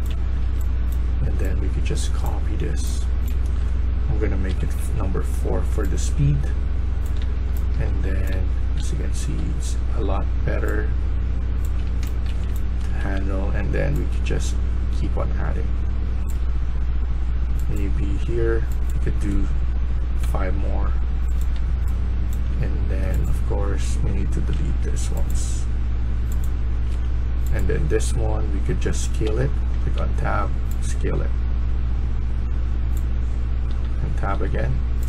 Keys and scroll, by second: 0.0-0.8 typing, 2.2-3.0 s, 4.1-4.9 typing, 7.1-9.8 typing, 11.7-12.4 typing, 20.1 5, 21.4-22.4 a, 24.4 Delete, 26.8 Delete, 29.1 Tab.